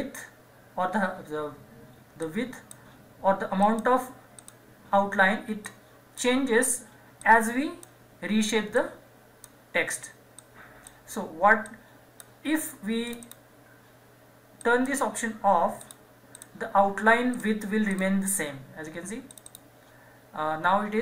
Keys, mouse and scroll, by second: 2.2-13.1 drag.